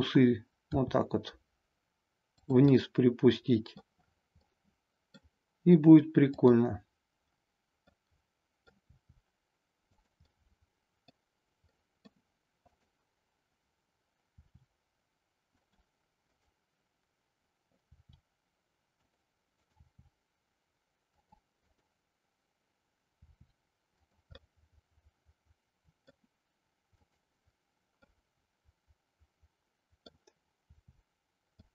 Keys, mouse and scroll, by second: 0.6 r, 2.4 click, 2.8-3.9 middle drag, 4.5-5.2 middle drag, 7.9-8.7 middle drag, 9.0 r, 9.9 click, 10.4-11.2 middle drag, 11.7-12.0 middle drag, 12.0 scroll down 1, 12.7-13.9 drag, 14.3 r, 16.2-17.4 drag, 17.9 r, 19.5 click, 19.7 r, 21.3 click, 21.5-22.7 drag, 23.2 r, 24.4-26.0 middle drag, 26.2 scroll down 1, 26.9-28.2 drag, 28.2-30.2 middle drag, 30.5 r, 31.5 click.